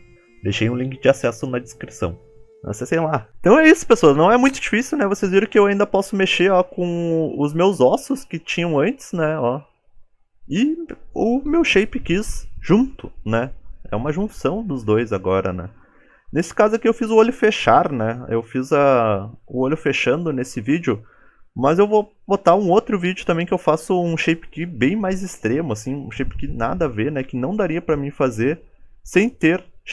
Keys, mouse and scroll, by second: 3.3 g, 3.9 middle click, 4.8 click, 5.4 g, 8.9 g, 9.8 middle click, 11.0 KP_Decimal, 11.4-12.0 scroll down 16, 12.0 middle click, 13.5-14.0 scroll down 3, 15.0 alt+g, 15.4-16.0 scroll up 9, 16.0 shift+middle click, 16.4-16.7 scroll down 4, 16.7 middle click, 17.3 click, 17.9 g, 19.3 g, 20.1 click, 20.4 middle click, 21.9 click, 22.7 click, 23.6-24.0 scroll up 5, 24.0 middle click, 25.8 scroll down 4, 26.1 middle click, 26.1 scroll up 4.